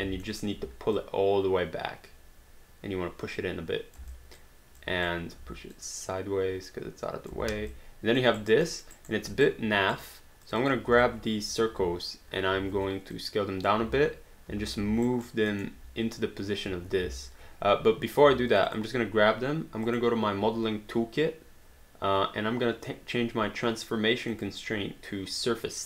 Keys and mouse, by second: 0.2 alt+middle click, 1.0 click, 4.1 alt+click, 5.8 click, 7.5 alt+d, 7.8 alt+click, 8.4 alt+right click, 8.6 alt+middle click, 8.9 alt+right click, 9.4 right click, 10.4 click, 11.0 alt+click, 12.6 r, 13.8 space, 15.0 alt+right click, 15.6 alt+middle click, 17.0 ctrl+z, 18.2 q, 18.5 click, 19.9 click, 24.3 click.